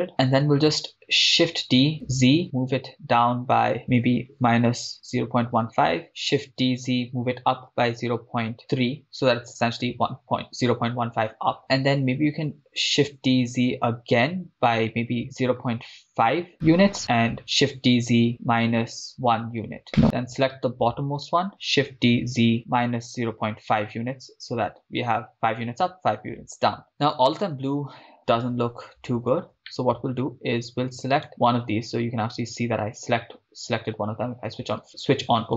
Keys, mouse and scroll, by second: 1.7 shift+d, 2.0 z, 4.5-5.6 typing, 6.1 Return, 7.9 z, 7.9 0, 7.9 ., 8.6 3, 8.8 Return, 13.2 shift+d, 13.5 z, 15.2-15.6 typing, 16.7 Return, 17.7 shift+d, 18.0 z, 18.4 -, 19.1 1, 19.9 right click, 26.4 Return, 28.7-29.1 scroll up 3, 29.8-30.3 shift+middle drag, 31.2 right click, 32.1 click.